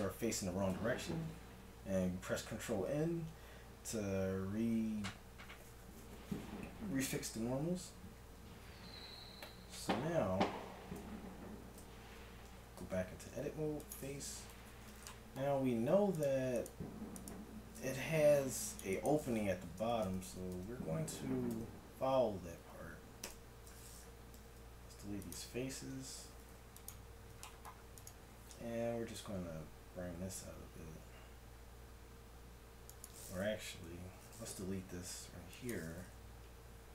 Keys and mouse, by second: 9.8 Tab, 11.3 z, 11.8 z, 12.1 Tab, 14.5 t, 16.3-19.2 right drag, 18.2 c, 19.8 ctrl+KP_Add, 21.5 KP_1, 23.3 ctrl+KP_Subtract, 24.3 x, 25.7 ctrl+Tab, 29.0 s, 34.6 x.